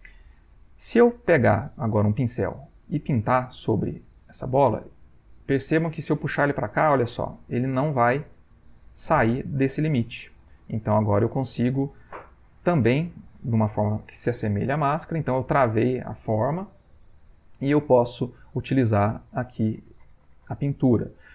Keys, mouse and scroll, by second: 2.6 click, 3.6-15.4 drag, 18.7-21.3 drag.